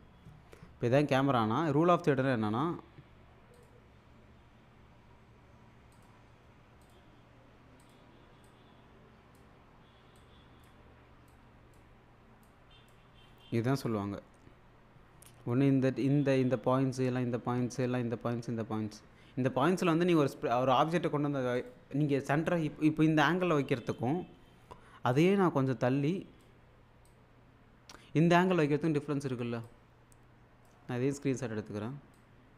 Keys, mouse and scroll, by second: 3.6 click, 6.0-9.4 drag, 21.6 click, 25.1-26.7 drag, 29.6-30.9 drag, 32.0-32.5 shift+super+click.